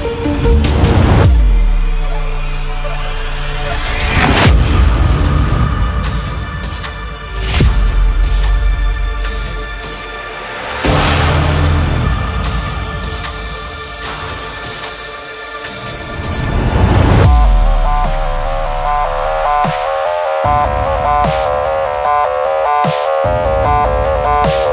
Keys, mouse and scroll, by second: 0.0-2.1 typing, 2.6-4.7 drag, 4.3 Tab, 4.7 Right, 6.0 space, 6.2 click, 6.4 space, 6.6 space, 7.7 click, 10.1 click, 12.5 click, 14.4 Left, 15.6 scroll down 1, 15.9 space, 16.0 click, 16.2 space, 16.7 click, 16.8 click, 18.2 click, 19.3 scroll up 1, 19.5 scroll down 1, 19.6 scroll up 1, 19.7 space, 19.8 click, 20.0 space, 20.6 scroll up 1, 21.3-24.5 drag, 24.5 click.